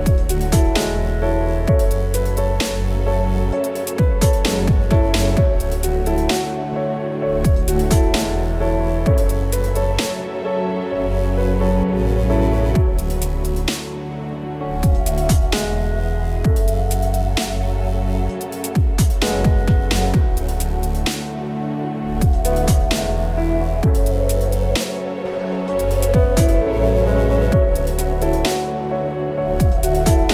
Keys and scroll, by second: 8.4 space.